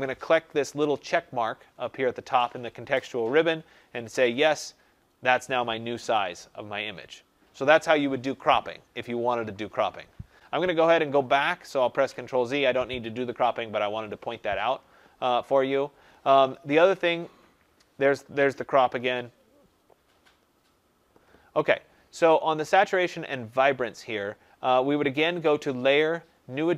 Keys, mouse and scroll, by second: 4.2 click, 11.7 click, 11.9 ctrl+z, 16.4 click, 19.9 click, 25.5 click.